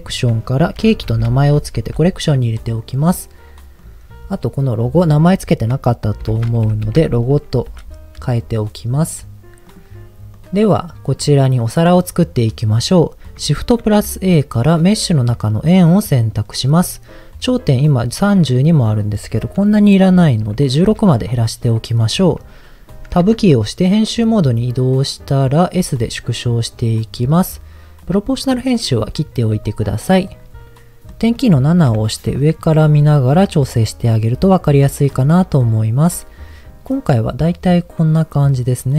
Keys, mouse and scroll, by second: 1.9 Return, 3.8 click, 4.8 click, 5.0-7.8 drag, 9.7 click, 10.3 click, 11.0 click, 13.8 shift+a, 16.6-17.0 scroll down 1, 18.9-20.8 drag, 23.4 Tab, 25.8 s, 26.8 click, 27.1-27.8 scroll up 2, 28.0 click, 28.8 scroll up 2, 29.4 s, 30.2 click, 30.6 middle click, 31.3-31.8 scroll down 1, 31.8 KP_7, 32.8 s, 35.1 click, 35.5-36.0 scroll up 1, 36.0 s, 36.7 click.